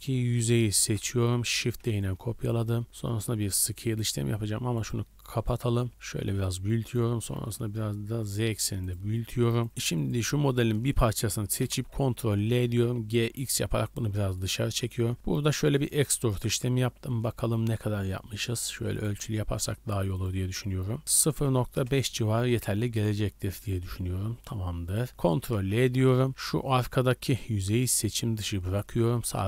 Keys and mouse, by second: 0.8 z, 1.6 shift+d, 2.9 middle click, 3.2 s, 4.8 click, 5.4 click, 5.9 s, 6.7 click, 6.8 click, 6.9-9.6 middle drag, 7.1 s, 9.6 click, 10.1-14.3 middle drag, 11.6 ctrl+l, 12.8 g, 14.5-16.4 middle drag, 15.0 e, 20.1-24.8 drag, 25.4 ctrl+l, 26.3 z, 26.5 3, 27.8 shift+middle click, 28.5 z, 29.1-29.4 middle drag.